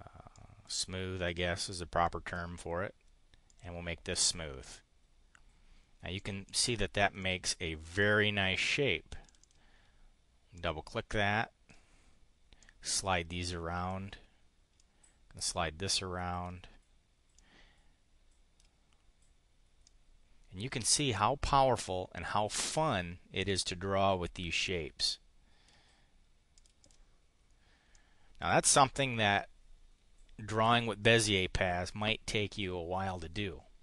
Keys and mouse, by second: 0.4 click, 2.2 click, 3.4 click, 6.2 click, 6.4 click, 7.2 click, 9.2 click, 10.5-11.8 drag, 12.6-14.0 drag, 14.7-16.5 drag, 17.3-18.6 drag, 19.8-22.6 drag, 23.5-25.8 drag, 26.5 click, 26.8 click, 27.8 click, 28.6 click.